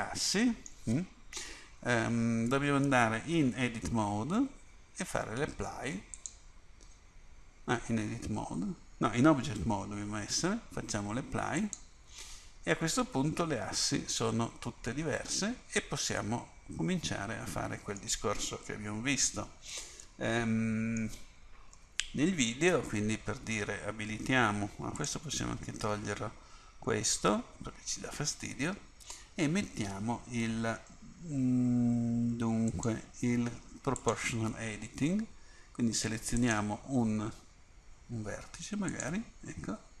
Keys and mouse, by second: 1.4 KP_1, 4.0 Tab, 6.3-8.9 drag, 9.7 Tab, 11.7-13.9 drag, 13.9 Tab, 16.7-20.6 drag, 21.8 KP_1, 25.1-31.1 drag, 32.8-36.5 drag, 39.0-40.0 drag.